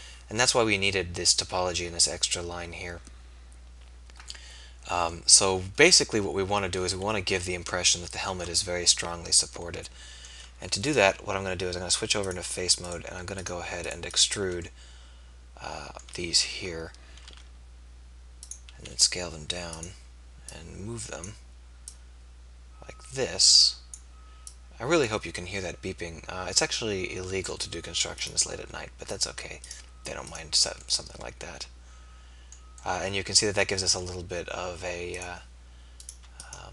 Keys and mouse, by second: 14.2 middle click, 17.2 e, 18.9 s.